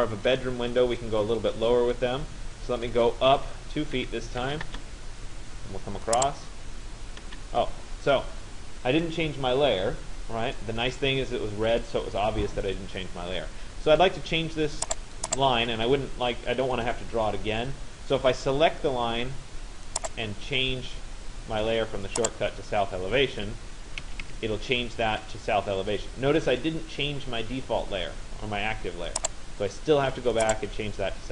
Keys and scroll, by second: 3.6 2, 4.7 Return, 23.6 Escape.